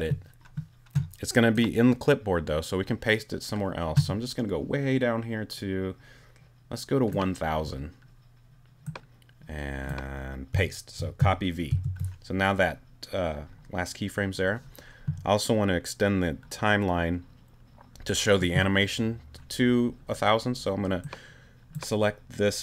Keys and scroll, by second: 11.7 super+v.